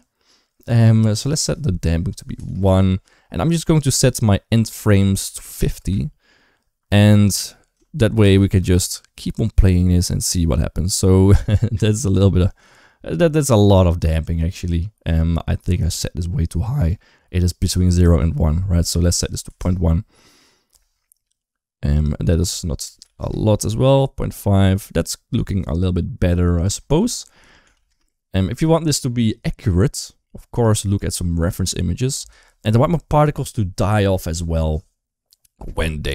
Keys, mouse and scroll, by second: 1.2-2.3 drag, 3.8-5.4 drag, 5.6 space, 8.0 space, 8.4 space, 17.8-19.4 drag, 21.7-23.0 drag, 26.4-27.7 drag, 30.7-32.1 drag.